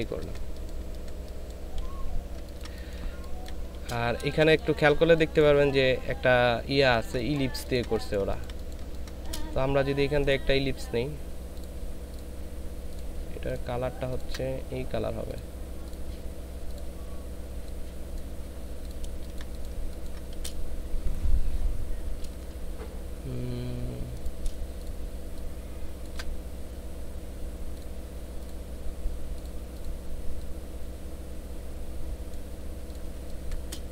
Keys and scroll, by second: 0.1 ctrl+space, 3.0 ctrl+space, 4.2 ctrl+space, 6.8 ctrl+space, 8.8 typing, 19.1 ctrl+space, 19.7 ctrl+space, 33.2 ctrl+space.